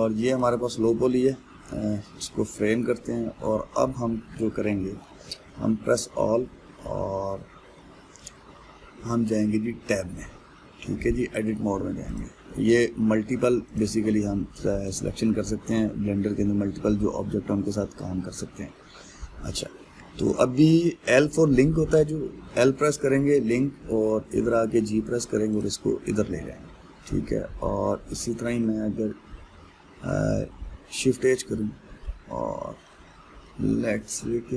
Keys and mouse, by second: 1.0 click, 2.2 KP_Decimal, 2.9-6.6 middle drag, 6.6 a, 7.4-10.0 middle drag, 10.0 Tab, 11.5-12.8 middle drag, 12.8 click, 13.2-14.4 middle drag, 14.4 click, 15.5 click, 16.9-19.9 middle drag, 25.0 g, 28.0-31.1 middle drag, 31.1 shift+h, 32.0-34.5 middle drag.